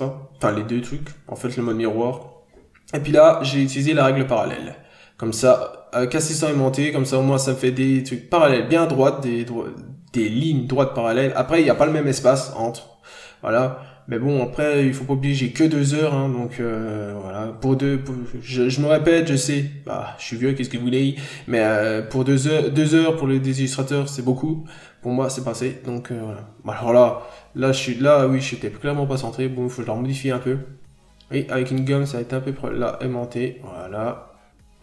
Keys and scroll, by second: 3.1 ctrl+z, 7.3 ctrl+z, 8.4 ctrl+z, 10.6 ctrl+z, 11.2 ctrl+z, 15.8 ctrl+z, 19.0 scroll up 1, 19.1 b, 30.8 ctrl+z, 31.8 ctrl+z, 34.1 ctrl+z.